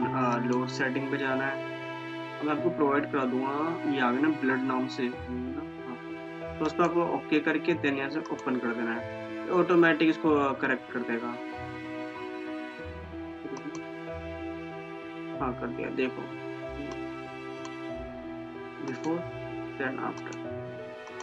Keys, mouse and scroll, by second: 6.8 click, 13.8 click, 17.1-19.0 drag, 20.8 click.